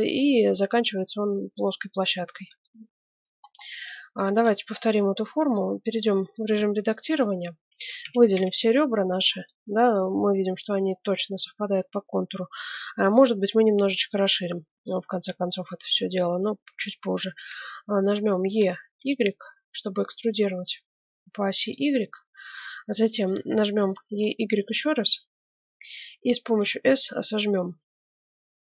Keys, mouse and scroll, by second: 1.7-6.3 middle drag, 5.0 Tab, 6.3 click, 6.5-8.3 middle drag, 6.9 click, 7.7 a, 8.0 a, 8.3 a, 9.1-10.7 middle drag, 10.9 middle click, 18.4 e, 23.7 e, 26.5 s.